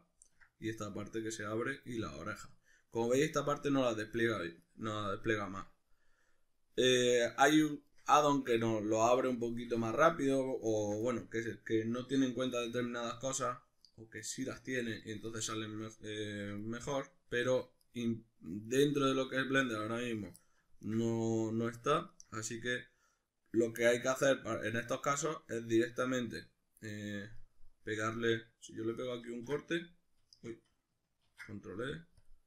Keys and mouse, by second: 0.2-6.7 ctrl+middle drag, 6.7-7.8 drag, 7.8-10.7 shift+middle drag, 10.7 alt+right click, 11.1-12.8 middle drag, 12.8 alt+shift+right click, 13.3-14.3 middle drag, 14.3 right click, 15.1 ctrl+right click, 15.3-16.3 middle drag, 16.3 ctrl+right click, 16.7-17.9 middle drag, 17.9 ctrl+right click, 18.7 ctrl+right click, 19.1-20.1 middle drag, 20.1 ctrl+right click, 20.4-22.1 middle drag, 22.1 ctrl+right click, 22.5-26.5 middle drag, 27.4-32.4 middle drag, 29.3 ctrl+u, 30.5 Escape, 31.3 ctrl+e.